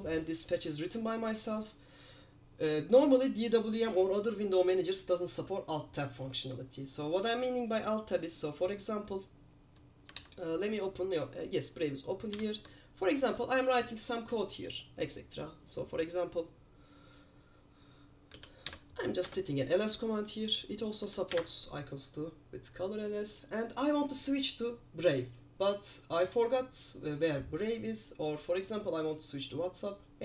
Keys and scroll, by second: 10.3 super+2, 12.5 super+9, 18.5-19.3 typing, 19.3 Return.